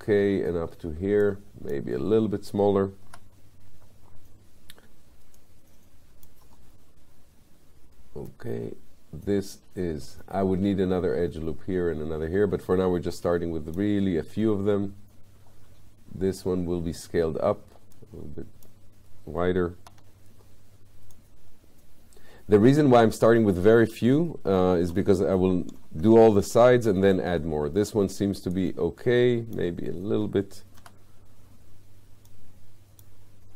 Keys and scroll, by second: 3.1 r, 19.9 w, 30.8 r.